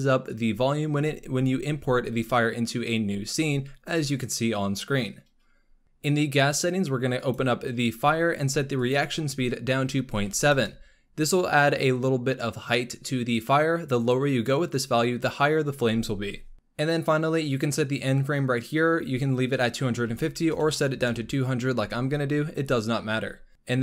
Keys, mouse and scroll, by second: 5.8 scroll down 6, 7.1 click, 7.8-8.7 scroll down 2, 8.7-11.9 drag, 16.5-18.3 scroll down 7, 18.5-20.5 drag, 20.5 KP_0, 23.4-23.8 drag.